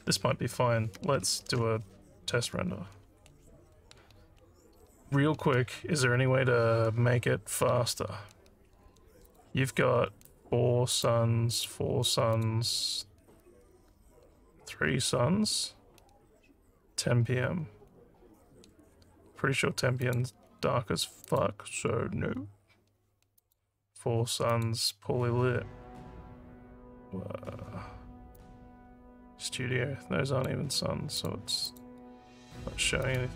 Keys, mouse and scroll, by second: 1.4 ctrl+s, 9.3 click, 10.2 click, 10.9 click, 11.5 click, 12.3 click, 20.0 click, 21.2 click, 23.4 click, 24.5 click, 28.3-30.5 drag, 31.2 click, 31.6 click, 33.0 click.